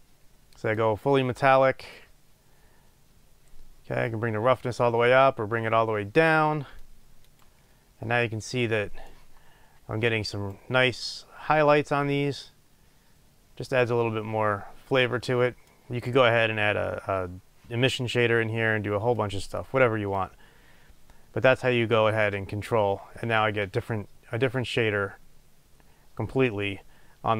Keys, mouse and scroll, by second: 7.5-20.6 right drag, 20.6-27.3 drag.